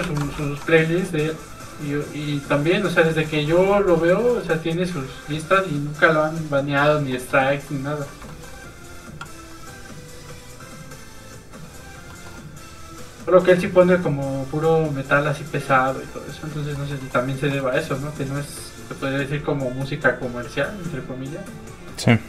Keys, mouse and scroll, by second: 0.0 ctrl+Tab, 0.4 shift+middle click, 1.0 middle click, 1.1 f, 1.2 click, 3.1 shift+middle click, 3.3 middle click, 4.6 click, 7.3 middle click, 8.2 shift+middle click, 10.5 middle click, 10.8 click, 12.1 middle click, 12.5 click, 13.4 middle click, 14.4 click, 16.7 shift+middle click, 17.0 middle click, 17.1-17.5 scroll up 1, 17.5 middle click, 19.6 click.